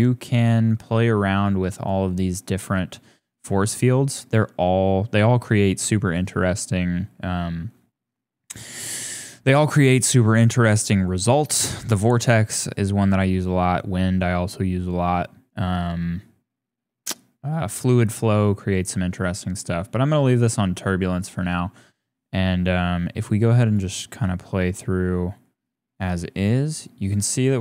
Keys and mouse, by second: 0.8 click, 1.7-18.5 drag, 20.8-23.4 drag.